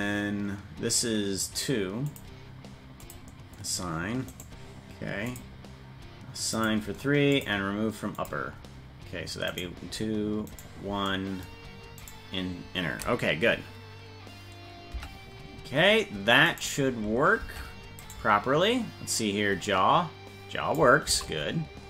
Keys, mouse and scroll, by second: 2.0 click, 3.0 click, 4.3 right click, 5.3 click, 6.5 click, 7.3 click, 8.1 click, 9.5 right click, 10.4 right click, 12.0 right click, 14.9 Tab, 16.5 right click, 17.4 ctrl+Tab, 18.0 right click, 19.1-20.8 drag, 21.0 ctrl+x.